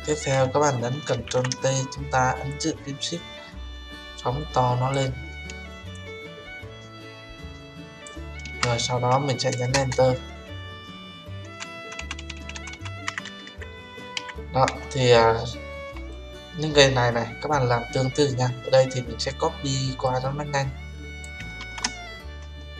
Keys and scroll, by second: 1.2 ctrl+t, 9.7 Return, 21.5 ctrl+z.